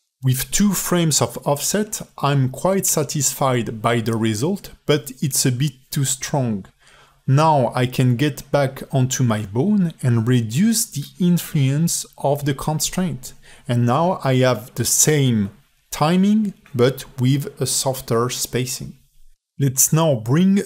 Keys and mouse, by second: 6.9 space, 7.6 ctrl+Tab, 9.8 ctrl+Tab, 10.0 click, 11.5-12.8 drag, 13.1 space, 18.2-20.6 drag.